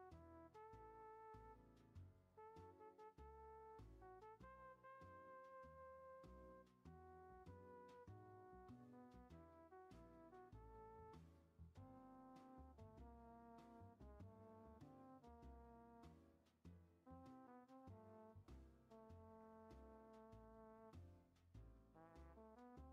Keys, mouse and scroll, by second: 2.5-4.8 middle drag, 4.8-6.1 drag, 6.1-6.5 middle drag, 6.5 r, 8.6-10.3 drag, 10.3 scroll down 1, 10.6-14.5 middle drag, 14.5-14.9 drag, 14.9-16.3 middle drag, 16.3-19.1 drag, 19.1 scroll down 2, 19.4-22.9 shift+middle drag.